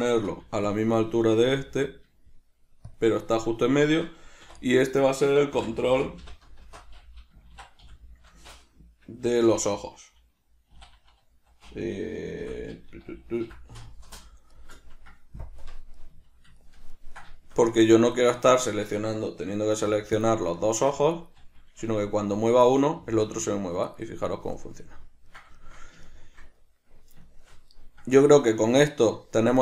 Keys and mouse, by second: 0.4 g, 0.9 click, 1.1-3.1 ctrl+middle drag, 1.6 g, 3.1 shift+click, 4.6 F2, 14.7-18.3 middle drag, 15.7 KP_Decimal, 18.3 right click, 18.7 shift+right click, 19.8 ctrl+p, 21.3 right click, 22.1 g, 22.9 right click, 23.1 g, 24.1 right click, 24.8-29.6 ctrl+middle drag.